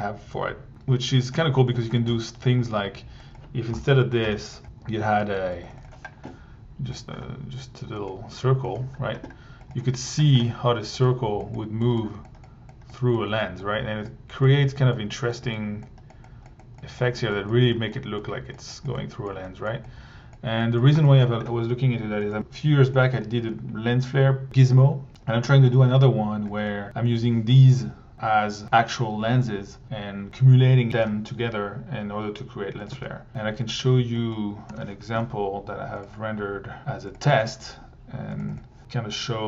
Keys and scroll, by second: 1.7 1, 3.7 Delete, 4.6 p, 5.8 1, 9.7 1, 27.1 1, 32.9 1, 34.7 r, 38.4 1.